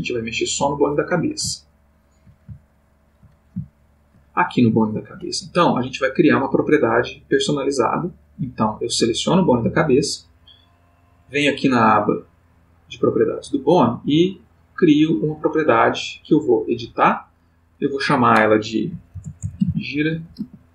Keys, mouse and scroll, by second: 0.0 click, 2.1 ctrl+middle click, 2.5-3.3 ctrl+middle drag, 3.7 ctrl+shift+middle click, 10.8 click, 14.3 click, 16.9 click, 17.8 click, 19.1-20.4 typing.